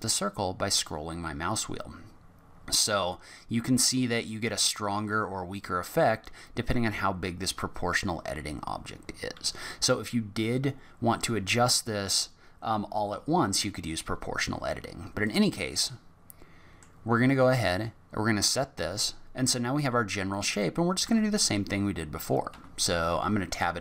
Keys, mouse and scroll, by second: 15.8 middle click, 17.8 middle click, 20.3 click, 21.0 4, 21.4 click, 22.5 3, 23.5 click.